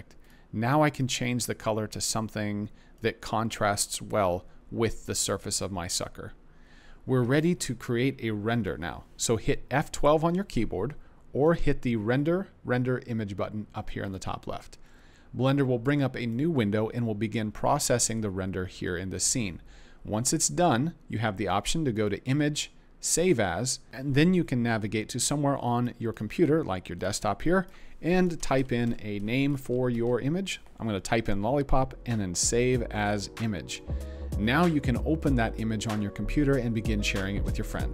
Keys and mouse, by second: 0.2 click, 11.4-14.3 drag.